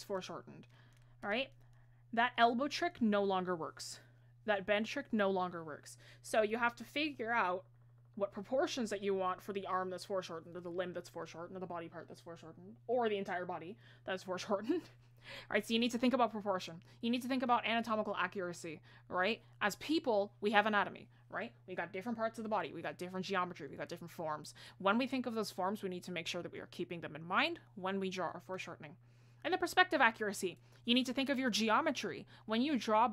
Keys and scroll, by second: 6.2 ctrl+z.